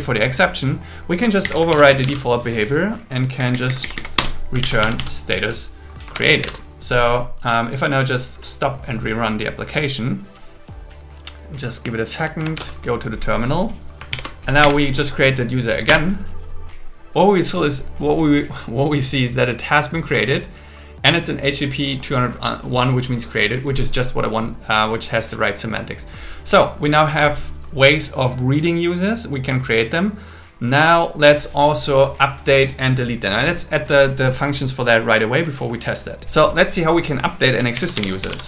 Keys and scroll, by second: 1.4 shift+8, 1.7 shift+h, 3.4 Down, 4.2 Return, 4.6 super+s, 6.2 ctrl+Tab, 6.4 ctrl+r, 12.6 ctrl+t, 14.2 ctrl+l, 14.6 Up, 15.9 Return, 36.2 BackSpace, 37.8 alt+l, 38.0 shift+p.